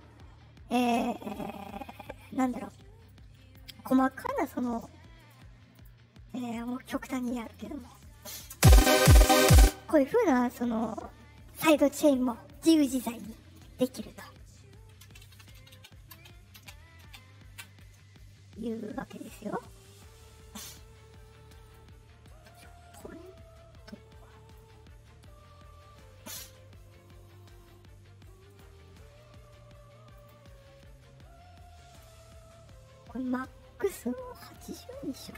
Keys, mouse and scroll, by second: 0.9-1.5 scroll down 2, 3.0 click, 3.9 right click, 4.3 click, 5.1 right click, 5.7 click, 6.2 right click, 6.5 right click, 6.8 right click, 7.0 right click, 7.4 right click, 7.7 right click, 8.0 right click, 8.5 space, 9.5 space, 15.0 ctrl+z, 16.5 ctrl+z, 19.5 right click, 21.6 right click, 22.4 right click, 23.2 click, 28.4 right click, 30.1 click, 31.9 right click, 33.8 click.